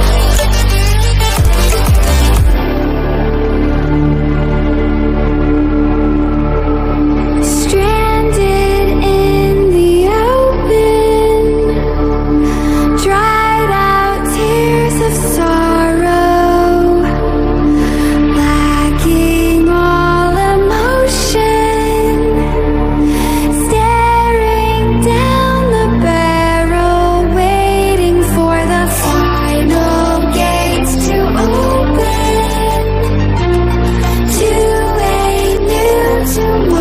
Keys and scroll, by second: 5.8 ctrl+=, 7.2 ctrl+-, 27.8 ctrl+-, 31.4 0.